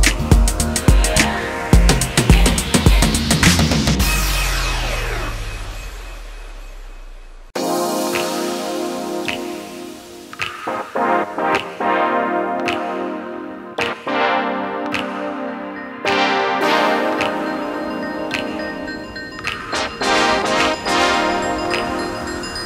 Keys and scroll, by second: 21.9 ctrl+t.